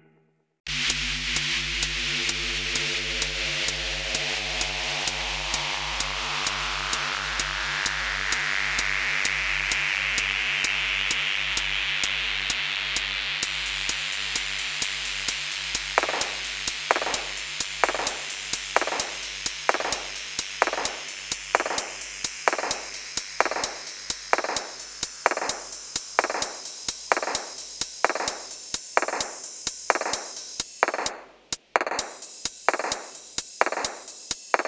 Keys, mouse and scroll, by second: 0.4 double click, 1.9 shift+click, 3.0 alt+f, 3.4-3.9 scroll down 1, 4.0 shift+click, 4.6 shift+click, 5.7 shift+click, 6.6 alt+f, 8.3 shift+click, 9.1 alt+f, 9.7 middle click, 10.4 shift+click, 12.6 typing, 12.8 middle click, 14.5 typing, 14.6 shift+click, 16.0-16.3 scroll up 1, 16.3 right click, 19.4-20.3 scroll up 1, 20.3 middle click, 21.3 ctrl+click, 21.6 ctrl+click, 22.0 ctrl+click, 23.1-23.7 scroll down 1, 23.7-24.8 typing, 24.0 scroll down 1, 24.4 shift+middle click, 26.0 typing, 26.3 middle click, 27.3 r, 27.8 shift+click, 28.7 shift+middle click, 29.7 right click, 31.0 scroll up 1, 31.5 shift+middle click, 33.0 shift+click, 33.2 right click, 34.2 middle click.